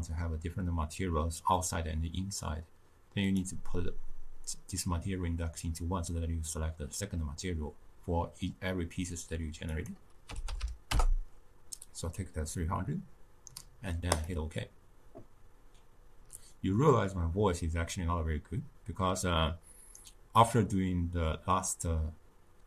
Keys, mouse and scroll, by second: 10.9 0.